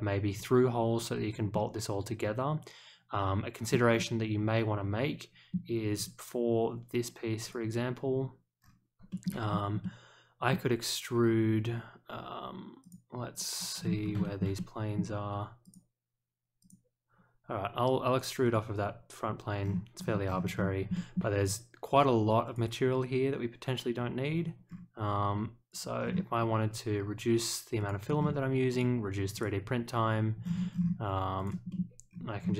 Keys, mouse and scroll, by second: 1.5-3.7 middle drag, 3.9-5.5 middle drag, 5.9 click, 7.4 click, 8.5 scroll down 1, 9.1 shift+middle click, 9.4-9.8 scroll down 1, 9.8 middle click, 12.8 click, 13.3 click, 13.7-14.1 scroll up 1, 14.2 shift+middle click, 14.5 middle click, 15.6 click, 16.6 click, 18.4 click, 19.6-20.8 scroll down 4, 20.9 shift+middle click, 22.4 click, 24.6-25.0 scroll down 1, 25.7 click, 26.0 scroll up 1, 27.7 click, 28.1 scroll up 1, 28.7 click, 29.3 click, 30.4-30.9 scroll down 2, 31.3 click, 31.7 middle click, 32.0-32.5 scroll up 2.